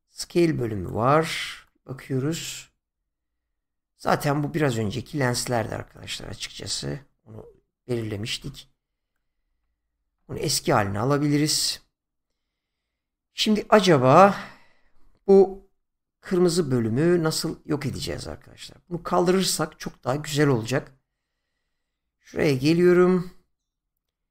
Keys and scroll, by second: 9.4 ctrl+z.